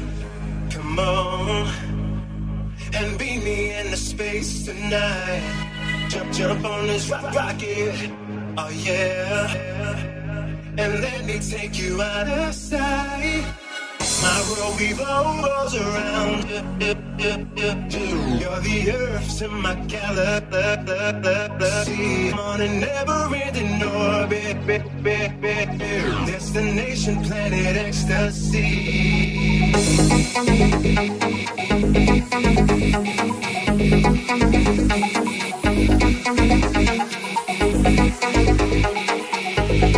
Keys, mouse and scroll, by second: 0.2 ctrl+r, 1.5-11.8 ctrl+middle drag, 3.5 ctrl+r, 7.8 ctrl+r, 12.3-15.9 ctrl+middle drag, 14.3 ctrl+r, 14.7 alt+z, 15.9 right click, 15.9-17.7 middle drag, 16.5 j, 17.7 right click, 17.8 shift+middle click, 18.2 right click, 18.2-19.8 middle drag, 18.6 j, 18.8 alt+z, 19.8 alt+click, 19.9 alt+middle click, 20.2 alt+click, 20.2-39.9 alt+middle drag, 21.0 right click, 23.4 g, 33.4 ctrl+r, 37.6 ctrl+r.